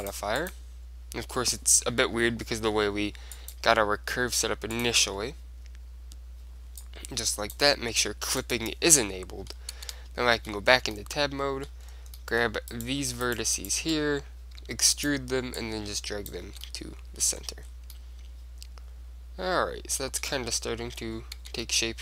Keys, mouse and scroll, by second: 3.5-6.4 drag, 6.9-10.4 drag, 9.1 middle click, 9.3 right click, 9.9 Tab, 10.4-14.1 middle drag, 12.9-13.9 drag, 12.9-16.9 right drag, 14.7 e, 15.7-17.7 drag, 16.6 Tab, 16.9 middle click, 17.7-19.9 middle drag, 21.0-21.7 scroll up 1, 21.5 Tab, 21.7-22.0 middle drag.